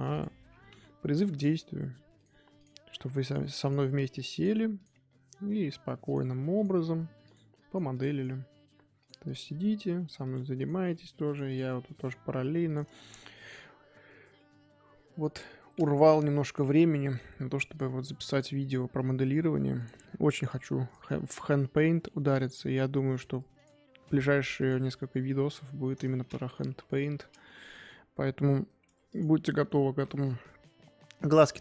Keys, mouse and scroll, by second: 0.1 click, 0.7 KP_3, 1.5 g, 2.5 click, 3.6 click, 4.7 click, 6.5 click, 7.5 click, 7.9 click, 9.2 click, 10.6 click, 11.5 click, 15.9-16.4 scroll down 3, 16.4 KP_1, 16.9 scroll up 1, 17.4 Tab, 18.3 click, 20.0 g, 21.2 click, 23.5 click, 25.3-26.6 middle drag, 26.6 KP_3, 27.2-28.8 scroll down 2, 29.1 click, 29.5-29.9 shift+middle drag, 29.9 shift+a.